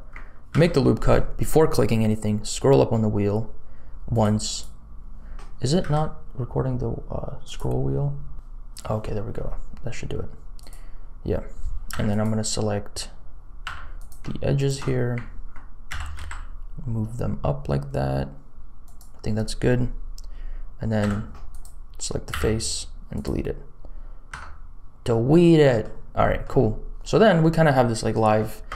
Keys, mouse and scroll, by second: 0.5 ctrl+r, 5.7 n, 7.4 click, 8.3 click, 10.5 click, 11.9 3, 12.1 click, 13.6 2, 13.9 click, 14.5 shift+click, 15.8 s, 21.0 3, 21.5 click, 22.2 x, 24.3 Tab, 25.0 middle click, 26.1 middle click, 26.6-27.4 scroll down 2.